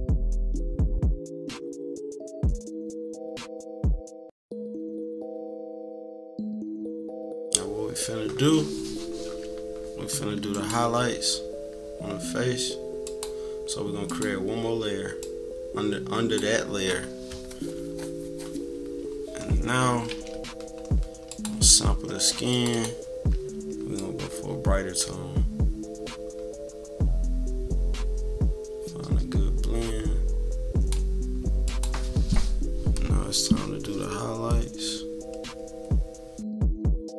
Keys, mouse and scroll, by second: 0.3-1.9 typing, 0.7 click, 1.4 click, 2.1-3.6 drag, 3.7 click, 4.5 click, 4.8 -, 4.9 =, 5.0 click, 5.5 =, 5.7 click, 6.5 -, 6.8 scroll down 1, 6.8 =, 6.9 click, 7.3 -, 10.5 click, 13.0-14.2 drag, 15.2-16.3 drag, 19.8 =, 21.2 click, 22.5 click, 23.9-30.9 drag, 31.6 click, 33.1 click, 34.8-37.1 drag.